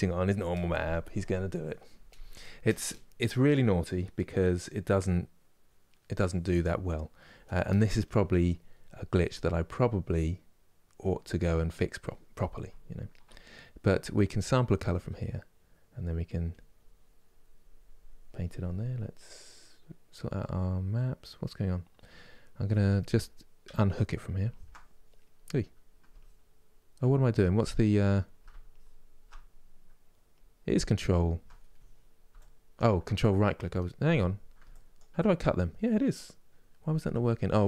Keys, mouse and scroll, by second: 12.4-15.5 ctrl+middle drag, 15.5-32.4 drag, 32.4 shift+right click.